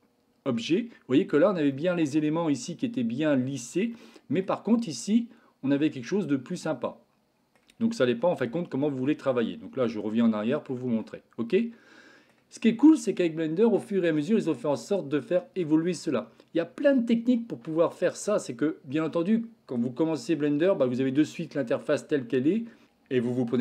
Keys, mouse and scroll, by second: 1.8-2.1 middle drag, 3.9-4.5 middle drag, 6.1-7.6 middle drag, 8.4 ctrl+z, 8.8 ctrl+z, 9.7 ctrl+z, 10.7 Tab, 11.6 middle click, 13.0-13.9 shift+middle drag, 20.7-21.5 middle drag.